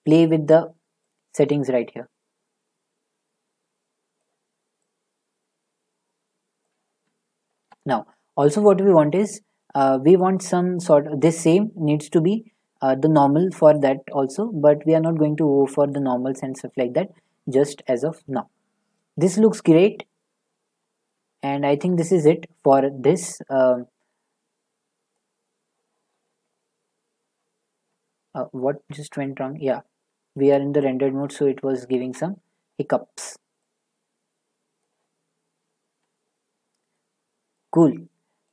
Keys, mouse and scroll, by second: 6.6 click, 8.1 middle click, 9.6 middle click, 9.6-12.7 scroll, 15.9 shift+middle click, 18.4 click, 21.1-21.5 scroll, 21.8 middle click, 22.6 shift+middle click, 25.1 middle click, 26.5 click, 26.5-26.9 click, 26.8 click, 29.2-31.9 middle drag, 29.2-29.5 scroll, 36.5 click, 37.5 click, 37.6 scroll, 37.6 z.